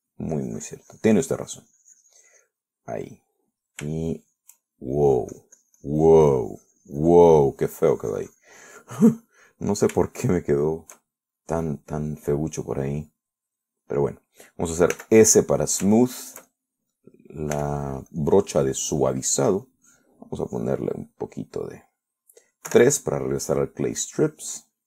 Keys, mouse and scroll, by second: 1.1 shift+middle click, 1.6-3.9 shift+drag, 3.9 middle click, 4.5 middle click, 5.0 scroll up 1, 5.2 shift+middle click, 6.2-9.9 shift+drag, 10.0 middle click, 10.7 middle click, 11.3 shift+middle click, 11.9 shift+middle click, 12.9-15.3 shift+middle drag, 16.2 s, 16.5 middle click, 17.6 shift+middle click, 18.8 f, 19.4 click, 20.0-21.1 drag, 21.7 click, 22.1-23.4 middle drag, 23.9 3, 24.3 middle click.